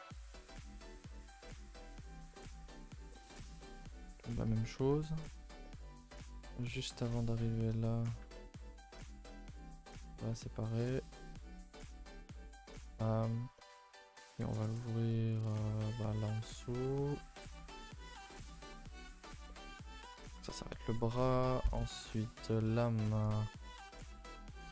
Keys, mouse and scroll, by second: 0.1 ctrl+i, 0.3 h, 0.7 a, 0.8 a, 1.0 middle click, 1.9-2.3 scroll up 4, 2.3 middle click, 2.9 scroll down 2, 3.1 middle click, 3.8 scroll up 1, 3.9-4.3 scroll down 3, 4.3 middle click, 4.5 a, 4.6 a, 4.7-6.3 middle drag, 6.3 scroll up 2, 6.5 2, 6.7 middle click, 7.2 alt+click, 7.5 middle click, 8.1 alt+shift+click, 8.3-10.2 middle drag, 10.2 alt+shift+click, 10.4-11.6 middle drag, 11.6 alt+shift+click, 11.8 middle click, 12.6 right drag, 12.8 a, 12.9 a, 13.0-14.5 middle drag, 14.5 scroll down 2, 14.8-16.3 middle drag, 16.3 click, 16.7 shift+click, 16.9 shift+click, 17.1-18.9 middle drag, 18.9 right click, 19.1 a, 19.3 a, 19.4-21.0 middle drag, 21.0 scroll up 1, 21.1 shift+middle click, 21.8 scroll up 2, 22.0-24.7 middle drag.